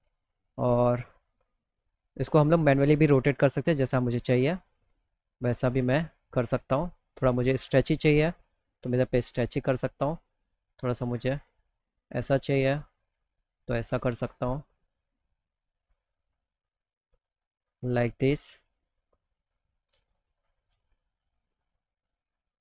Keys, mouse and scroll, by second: 1.1-3.3 drag, 1.1-3.3 right drag, 8.4 click, 8.4 right click, 9.4 scroll down 1, 10.5-13.7 drag, 10.5-12.8 right drag, 14.6 click, 15.5-17.8 drag, 18.9 click, 20.2-21.5 drag, 22.4 click.